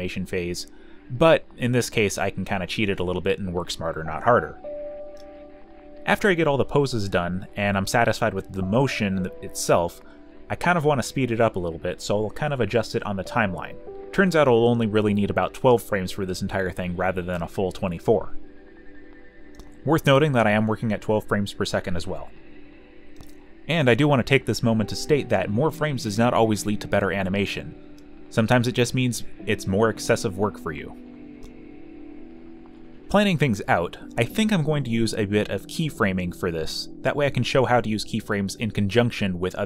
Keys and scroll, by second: 15.4-16.4 typing, 18.8-22.2 typing, 23.5-25.7 typing, 27.3 shift+f, 27.9 shift+f, 33.8 ctrl+shift+m, 34.1 space, 35.9 ], 38.9 q.